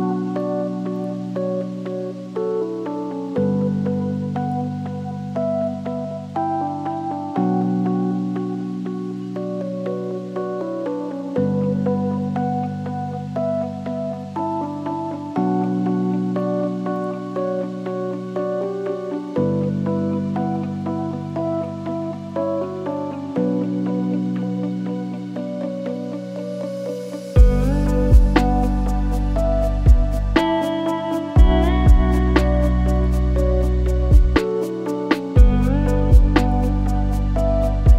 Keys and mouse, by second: 1.1 drag, 2.8 r, 4.9 click, 5.4 shift+click, 8.2 click, 9.1 g, 9.9-10.7 drag, 11.0 g, 13.4 g, 14.7 r, 17.8 g, 19.9-20.7 middle drag, 21.5-22.0 shift+middle drag, 24.5 r, 25.5 g, 26.8 drag, 27.4 click, 28.5 shift+click, 29.5-31.0 drag, 31.4-34.3 drag, 34.7-35.6 drag, 35.8 shift+middle drag, 37.6 shift+s.